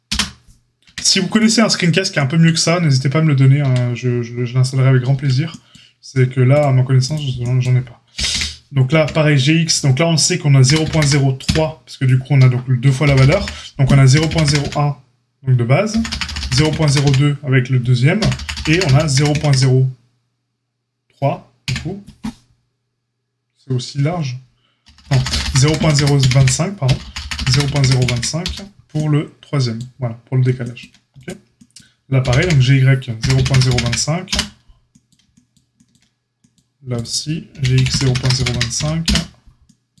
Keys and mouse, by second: 0.8 Tab, 1.2 click, 3.5 Tab, 5.1 Tab, 6.5 click, 7.1-31.1 middle drag, 8.1 g, 31.1-32.2 drag, 32.2-36.9 middle drag, 32.2 g, 36.9 click, 37.0-40.0 middle drag, 37.5 g.